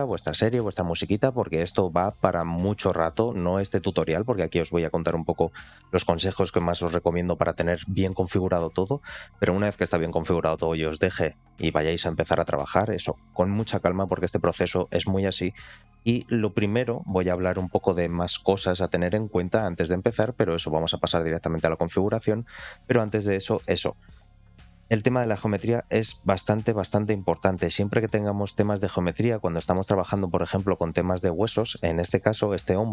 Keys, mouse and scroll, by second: 21.3 click, 22.7 click, 23.2 shift+middle click, 23.5-24.0 middle drag, 24.7 shift+h, 25.2-25.7 scroll up 2, 25.9 click, 26.8-27.1 scroll up 2, 27.3-28.1 shift+middle drag, 28.8-29.7 shift+middle drag, 29.9 alt+middle click, 30.3-31.4 scroll up 4, 30.8-31.4 middle drag, 31.6-32.0 shift+middle drag, 32.3-32.8 scroll down 2, 32.8-32.9 middle drag.